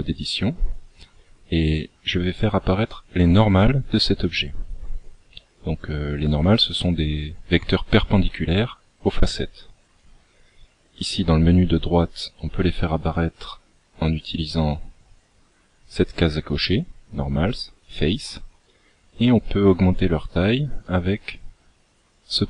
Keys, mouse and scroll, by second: 10.2 click, 12.4-14.4 scroll down 3, 18.3 click, 21.2 click.